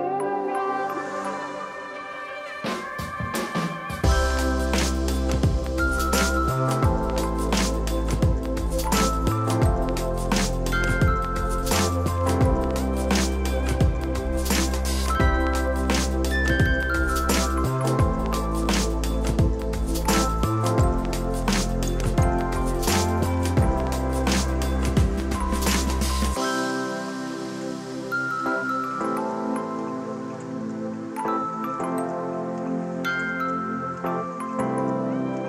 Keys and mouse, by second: 0.7 ctrl+click, 2.2 click, 5.0 alt+y, 5.2 click, 5.9 click, 7.1 shift+click, 8.7 click, 10.8 ctrl+click, 11.2 click, 12.4 ctrl+click, 12.8 ctrl+click, 13.0 ctrl+click, 13.7 ctrl+click, 14.2 ctrl+click, 24.3 click, 34.9 1, 34.9 Escape, 35.2 click.